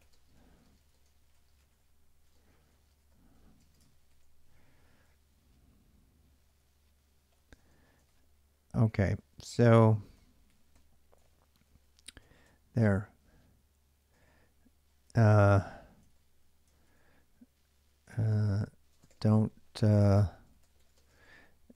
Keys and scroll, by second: 0.0-5.7 typing, 6.9-12.0 typing, 11.0 ctrl+j, 12.2 Return, 13.7-15.4 typing, 16.4 ctrl+[, 16.6-21.7 typing, 18.1 Return.